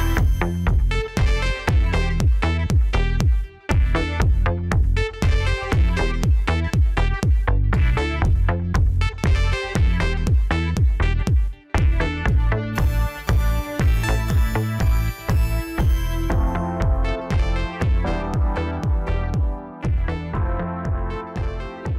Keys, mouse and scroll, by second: 1.8 drag, 2.2 scroll up 1, 4.3 g, 8.2 scroll down 3, 8.5-9.6 middle drag, 9.6 click, 9.7 scroll down 4, 10.0-11.9 middle drag, 11.9-13.0 scroll up 2, 13.0 g, 15.1 scroll down 1, 15.8 KP_7, 17.3 s, 21.3-21.9 middle drag.